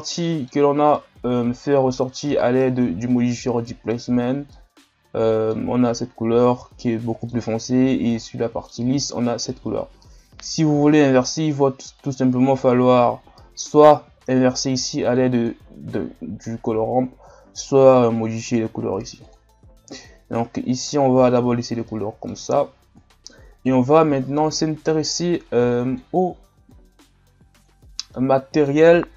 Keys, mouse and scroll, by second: 2.4-3.4 scroll up 1, 3.4-8.0 middle drag, 8.0 scroll down 1, 8.2-21.3 middle drag, 21.3 click, 24.4-28.6 drag.